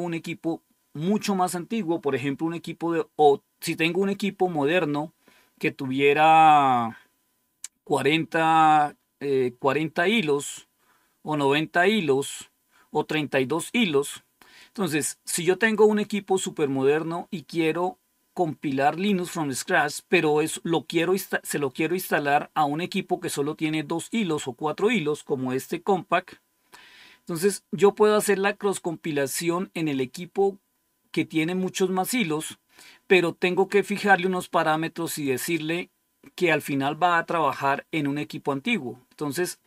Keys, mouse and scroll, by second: 14.5 click, 35.0 click.